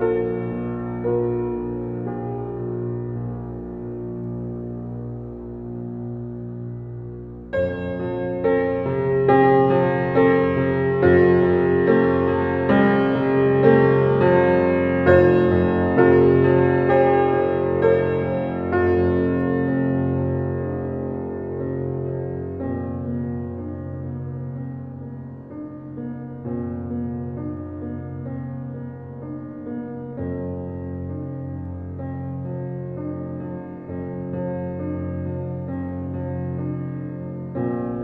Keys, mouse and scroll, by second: 0.0 click, 1.0 ctrl+drag, 3.9 g, 11.7 click, 26.0-29.0 drag.